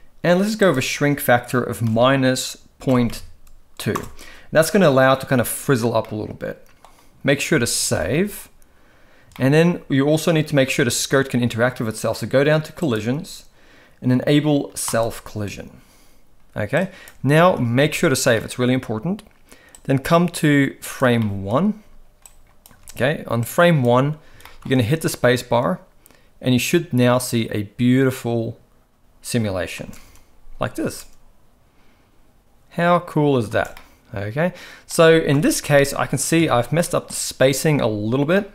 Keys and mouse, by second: 0.6-3.9 drag, 6.0-6.8 middle drag, 7.4 ctrl+s, 7.8 ctrl+s, 8.0 ctrl+s, 9.4 shift+middle click, 12.7 click, 14.9 click, 16.7 click, 17.3 ctrl+s, 17.6 ctrl+s, 17.7 ctrl+s, 18.3 middle click, 19.8-20.9 drag, 21.1 middle click, 22.2-22.6 drag, 22.8 x, 23.4 click, 24.4 shift+middle drag, 24.9 space, 29.7 space, 29.9 KP_1, 30.8 space, 33.5 space, 33.7-34.8 middle drag, 35.3 KP_1, 36.4 Tab, 36.8 shift+middle drag, 38.3-38.5 middle drag.